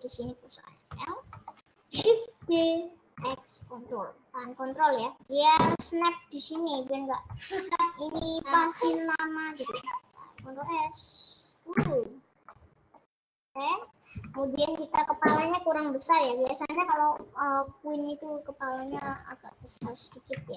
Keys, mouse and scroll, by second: 1.4 middle click, 2.0-2.4 scroll down 3, 2.4 shift+d, 7.0-15.9 middle drag, 15.9-16.2 scroll up 2, 16.2-18.9 middle drag, 18.9 click, 19.3 middle click, 19.7-20.0 scroll down 3, 20.2 KP_Add.